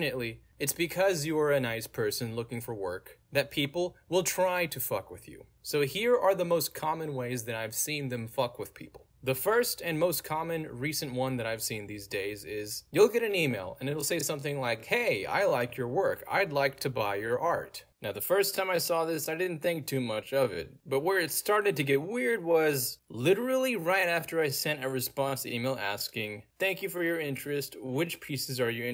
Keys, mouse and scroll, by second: 9.2 scroll down 1, 10.1 scroll down 2, 10.1-10.6 scroll up 2, 10.7-11.2 scroll up 2, 12.1-13.5 scroll down 2, 13.5 scroll down 1, 13.7-14.0 scroll up 2, 14.9 click, 19.0 scroll down 2, 19.7-20.8 scroll down 3, 20.1 middle click, 21.2 middle click, 21.2-21.7 scroll down 2, 22.0 middle click, 22.0-22.5 scroll down 2, 22.9 click, 23.4-24.6 middle drag, 23.4-24.3 scroll down 2, 24.3 scroll down 1, 25.3-26.3 scroll down 2, 27.6-28.1 scroll down 2, 27.8 middle click.